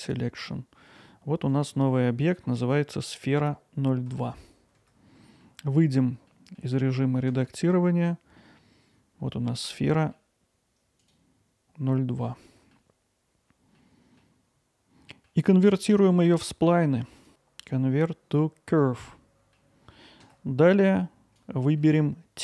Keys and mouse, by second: 1.5 click, 5.5 middle click, 6.3 middle click, 7.0 middle click, 10.0 middle click, 12.3-12.7 middle drag, 13.8-14.2 middle drag, 15.1 middle click, 15.8-17.2 right drag, 17.3-18.8 right drag, 19.1-19.5 middle drag, 20.9 click, 21.8-22.4 alt+middle drag.